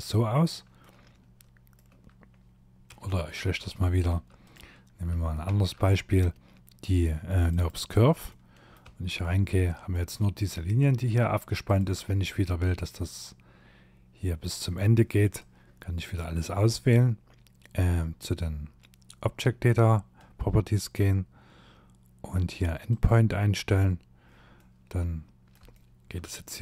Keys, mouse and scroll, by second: 1.9 Tab, 2.6 y, 3.1 x, 4.5 shift+a, 7.3 middle click, 7.9 Tab, 8.2 middle click, 9.7 click, 10.7 shift+click, 14.4 click, 21.9 click, 23.6 middle click, 24.8 shift+middle click.